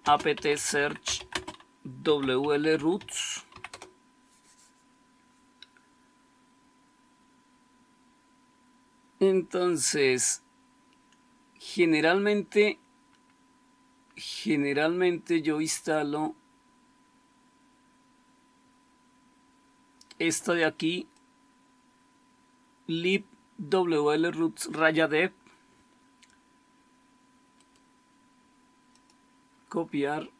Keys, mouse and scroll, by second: 0.0-3.6 typing.